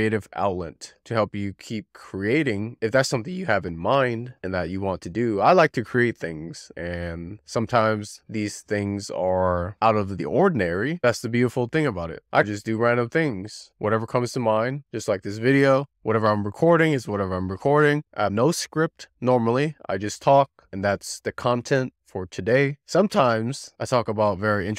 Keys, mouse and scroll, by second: 0.0 z, 0.2 click, 0.9 middle click, 2.1 scroll up 1, 2.3 scroll down 1, 2.4 middle click, 2.8 click, 3.1 scroll down 1, 3.2 middle click, 3.7 shift+click, 3.9 middle click, 4.0 shift+click, 4.2 middle click, 5.0 middle click, 5.4 click, 6.2 z, 6.5 click, 6.8 middle click, 7.6 middle click, 8.1 shift+click, 8.4 shift+click, 8.4 middle click, 8.6 click, 9.0 middle click, 9.1 click, 9.3 middle click, 9.9 middle click, 10.1 click, 10.6 middle click, 10.9 click, 11.1 click, 11.2 ctrl+click, 11.3 middle click, 11.5 ctrl+click, 11.5 middle click, 11.7 click, 12.0 middle click, 12.1 scroll down 3, 12.2 scroll up 2, 12.4 middle click, 14.0 scroll up 1, 14.0 shift+click, 14.3 middle click, 14.4 click, 14.7 middle click, 15.4 scroll down 2, 15.5-15.8 scroll up 2, 15.8 click, 16.2 middle click, 16.5 click, 16.8 middle click, 16.9 click, 17.0 middle click, 18.1 middle click, 18.8-19.4 scroll up 8, 19.4 alt+z, 19.6 click, 20.1 click, 20.6 click, 20.9-21.2 scroll down 3, 21.2 middle click, 21.4 alt+z, 21.5 middle click, 21.7-22.0 scroll up 2, 22.1 2, 22.2 shift+click, 22.4 middle click, 22.9-23.2 scroll up 2, 23.2 e, 23.3 r, 23.4 click, 23.7 z, 23.9 middle click, 24.1 scroll down 4, 24.5 middle click.